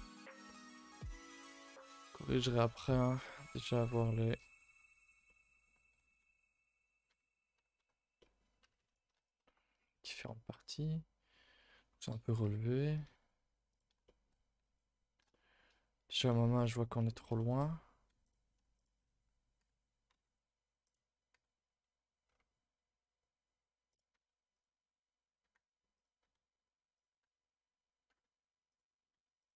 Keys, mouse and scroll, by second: 0.0 shift+click, 0.4 middle click, 0.8 g, 1.6 middle click, 2.0 click, 2.3 g, 3.0 middle click, 3.2 scroll down 2, 3.4 a, 3.5 a, 3.6 middle click, 3.8 3, 4.2 click, 4.5 shift+click, 4.7 shift+click, 4.9 shift+click, 5.2 middle click, 5.9 e, 8.1 middle click, 8.6 a, 8.7 a, 8.8 click, 9.1 shift+click, 9.4 middle click, 10.1 scroll down 1, 10.2 middle click, 11.2-12.4 scroll down 1, 12.4 KP_1, 13.0 z, 14.0 shift+middle click, 14.4 scroll up 2, 15.3 shift+middle click, 16.1 z, 17.0-17.3 scroll down 1, 17.3 shift+middle click, 17.6-18.1 scroll up 1, 18.2 alt+click, 18.7 alt+shift+click, 19.6 g, 20.8 click, 21.3 g, 24.1 z, 25.4 g, 26.2 r, 27.1 g, 29.4 alt+click.